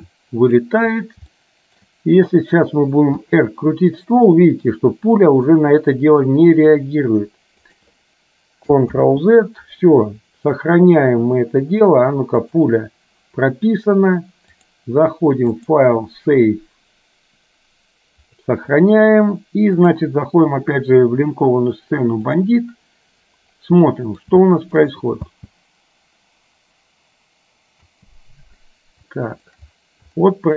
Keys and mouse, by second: 1.5 shift+middle click, 3.4 r, 9.1 ctrl+z, 12.5 click, 14.8 click, 15.8-18.6 drag, 19.9-23.1 drag, 24.0 middle click, 24.5 shift+middle click, 25.5 space, 29.1 shift+middle click, 30.4 shift+middle click.